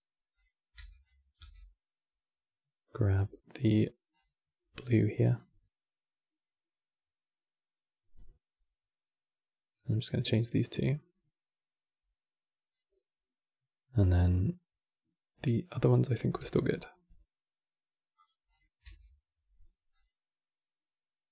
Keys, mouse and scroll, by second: 0.0 click, 1.1 e, 5.5-8.8 drag, 10.4-13.0 drag, 16.1 e, 18.2 click, 18.5 e.